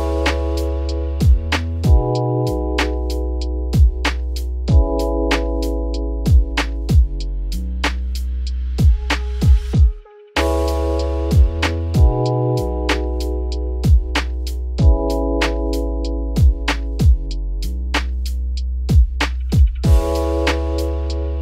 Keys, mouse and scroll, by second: 1.1 scroll down 2, 1.2-1.7 middle drag, 1.7-2.1 scroll up 5, 2.1-4.8 middle drag, 4.8 `, 5.6 click, 6.3 click, 7.4 alt+x, 9.3 click, 9.7-10.8 scroll up 2, 10.8-11.3 drag, 11.3-12.6 scroll up 4, 12.6 ctrl+a, 14.8-17.9 shift+drag, 18.2 `, 18.7-19.4 scroll up 3, 18.8 middle drag, 19.4-19.7 shift+middle drag, 19.7 Tab, 20.1 a, 20.9 shift+n.